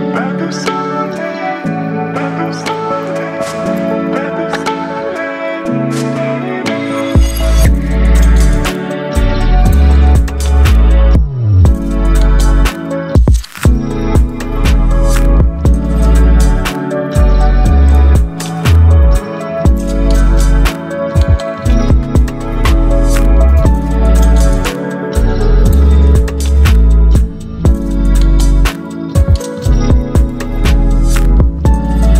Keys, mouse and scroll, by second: 0.8 alt+scroll down 1, 2.0-4.3 drag, 6.6 ctrl+0, 9.1-10.3 alt+drag, 10.7-11.7 alt+drag, 14.8-15.4 drag, 20.1 click, 24.1-31.0 drag.